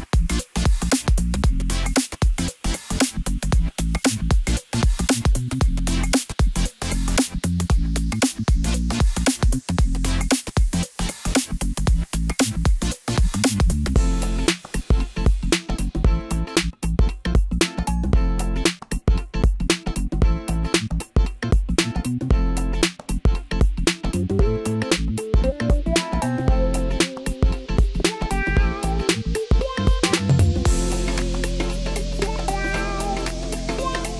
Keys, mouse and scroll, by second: 0.0 KP_0, 0.8-1.3 scroll up 1, 1.3-1.8 middle drag, 1.8-3.2 scroll up 1, 3.2 Tab, 3.7-4.0 scroll up 2, 4.0 scroll down 3, 4.3-5.6 middle drag, 5.6 click, 6.3 click, 7.6 shift+d, 11.3 p, 12.7 Tab, 13.3 click, 13.9-14.2 scroll up 1, 14.2 scroll down 2, 14.5-15.4 middle drag, 15.4-15.8 scroll up 1, 17.6 ctrl+a, 19.7 drag, 20.8 click, 21.3 click, 21.7-22.1 scroll up 1, 22.1-22.9 scroll down 2, 22.9 KP_1, 24.3 Tab, 25.0 a, 25.5-26.4 scroll up 1, 27.1 s, 30.7-31.5 scroll up 1, 31.5 s, 33.9 scroll up 2.